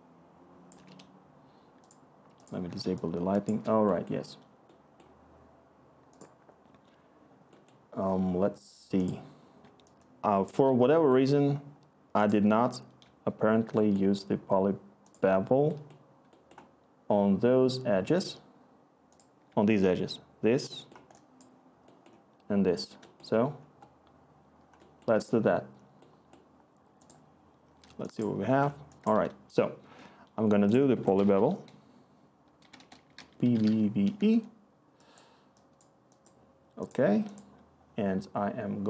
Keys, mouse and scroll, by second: 27.8-29.6 scroll, 30.9-34.0 typing.